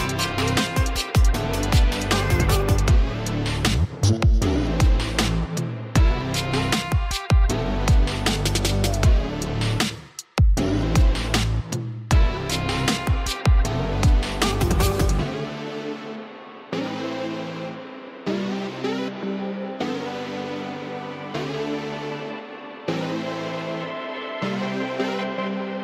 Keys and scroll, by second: 1.9 space, 3.2 space, 4.1 alt+space, 4.8 ], 5.1 [, 7.3 ctrl+z, 11.2 space, 13.1 space, 15.2-15.5 [, 16.0 [, 16.1 [, 16.2 [, 17.4 ctrl+z, 19.2 ctrl+z, 25.4 ctrl+alt+shift+e.